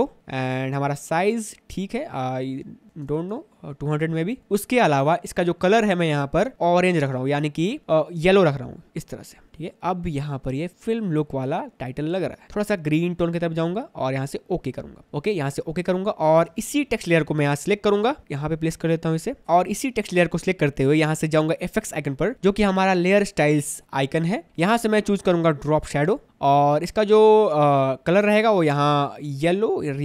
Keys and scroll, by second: 3.1 2, 3.5 Return, 16.6 space.